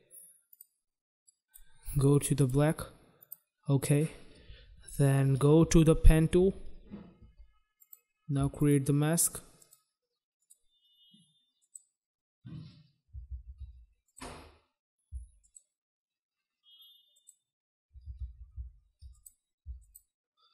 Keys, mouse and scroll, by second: 0.5 click, 1.2 click, 2.4 click, 2.4 click, 3.2 click, 6.0 g, 7.7 click, 8.5 shift+click, 9.6 shift+click, 10.4 shift+click, 11.6 shift+click, 13.2 ctrl+z, 14.0 click, 15.4 shift+click, 17.1 shift+click, 18.2 ctrl+z, 19.1 click, 19.8 shift+click.